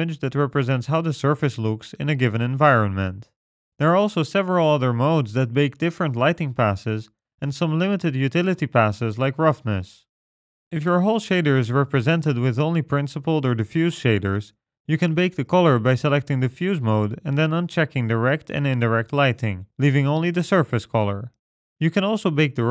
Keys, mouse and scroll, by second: 3.7 click, 18.8 click, 19.3 click, 22.5 click.